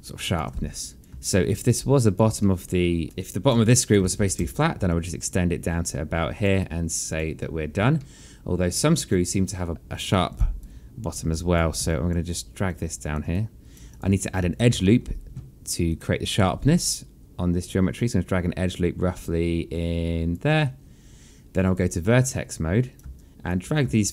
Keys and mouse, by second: 0.0 alt+click, 1.1 right click, 1.6 click, 2.2 alt+click, 3.0 alt+click, 3.8 right click, 4.4 click, 4.8 alt+click, 5.1 w, 5.6 click, 7.3 right click, 7.8 click, 8.7 alt+middle click, 9.7 click, 10.7 click, 11.3 right click, 12.0 click, 12.6 alt+click, 14.0 right click, 14.6 click, 14.8 alt+click, 15.5 alt+middle click, 16.6 click, 18.7 click, 22.3 click, 23.2 right click, 23.9 alt+click.